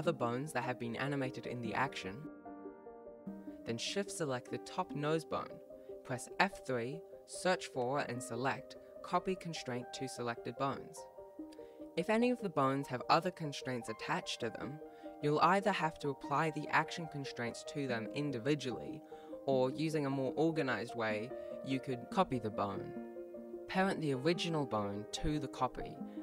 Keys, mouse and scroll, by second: 1.9-2.5 scroll up 1, 2.6 shift+right click, 2.7 shift+right click, 7.0 F3, 13.2 ctrl+z, 15.0 right click, 16.5 right click, 18.0 click, 21.0 ctrl+s, 23.2 right click, 24.5 shift+right click, 25.0 shift+right click, 26.0 F3.